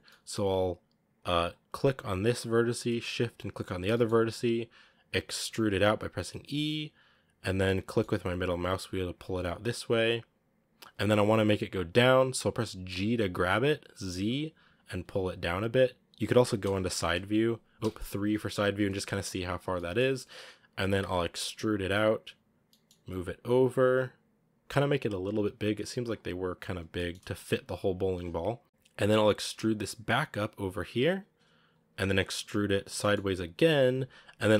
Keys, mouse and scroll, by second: 1.2-3.8 right drag, 3.8 shift+middle click, 4.4-5.3 scroll up 1, 5.3 e, 12.8 g, 16.5 KP_1, 17.8 KP_3, 18.2-19.2 scroll up 6, 19.2 g, 19.6-21.4 shift+middle drag, 21.4 e, 26.8 g, 29.4 e, 32.2 e.